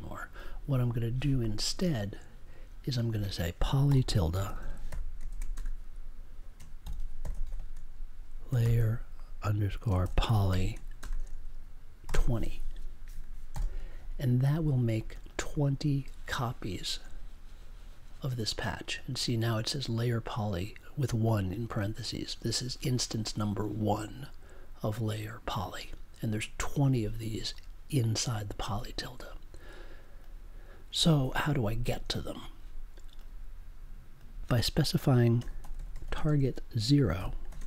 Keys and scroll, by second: 3.8 n, 5.2 shift+/, 5.5 space, 6.5-7.4 typing, 8.6 shift+-, 10.0 shift+p, 11.0 space, 12.0 2, 13.5 super+j, 35.3-37.5 typing.